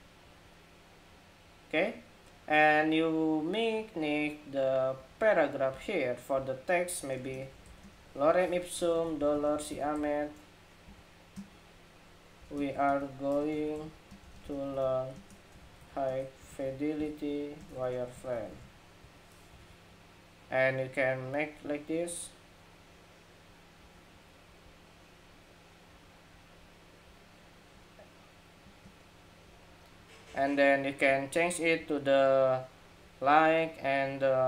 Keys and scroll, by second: 19.3 super+a, 21.8 Escape, 23.5 Escape.